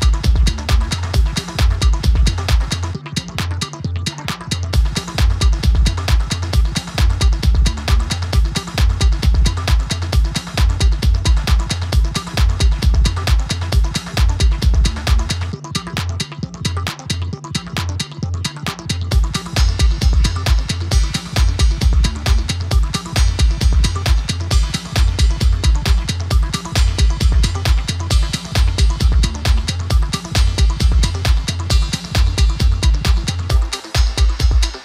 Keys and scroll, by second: 2.9 shift+a, 21.4 typing.